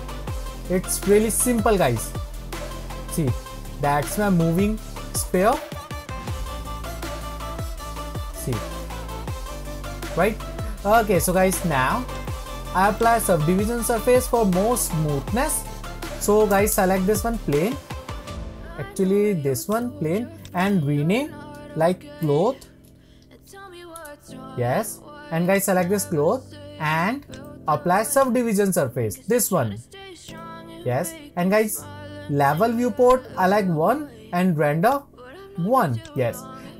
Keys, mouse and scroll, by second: 5.7-6.1 middle drag, 7.0-10.0 middle drag, 12.3-15.3 drag, 15.3-17.5 shift+middle drag, 17.5 click, 18.0-19.7 scroll down 4, 19.7 click, 20.4 click, 20.6-23.7 drag, 25.5 click, 26.1-27.3 scroll up 1, 27.3 click, 28.2-31.2 drag, 34.9-36.1 drag.